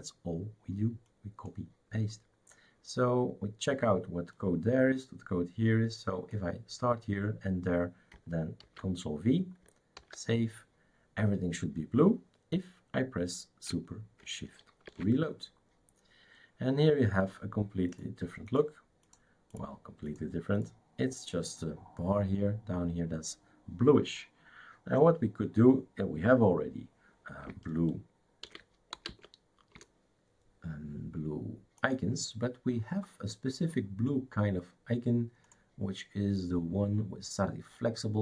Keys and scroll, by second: 8.6 ctrl+v, 9.9 ctrl+s, 14.9 shift+super+r, 28.4 shift+super+d, 28.7-29.5 typing, 29.7 Return.